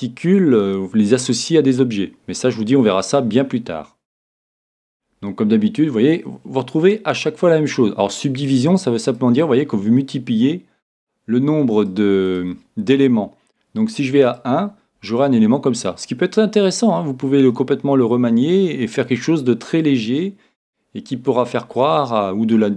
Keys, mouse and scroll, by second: 8.5-10.8 drag, 11.8-13.9 drag, 14.0 click, 14.3-16.0 drag, 15.1-17.0 middle drag, 16.0 click.